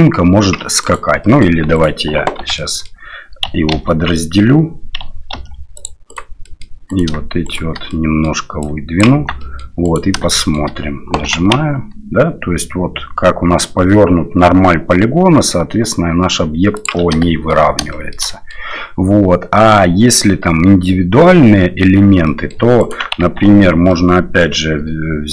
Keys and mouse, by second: 1.2 middle drag, 1.7 click, 2.4 Tab, 2.6 click, 3.7 ctrl+e, 5.3 ctrl+r, 6.5 click, 6.9 click, 7.4 shift+right click, 7.9 middle click, 8.6 click, 9.2 Tab, 9.4 middle click, 9.8 click, 10.3 shift+middle click, 11.2 g, 17.2-17.5 shift+middle drag, 17.9 shift+middle drag, 18.3 middle drag, 22.3 middle click, 22.8 right click, 23.2 Tab, 23.9 middle click.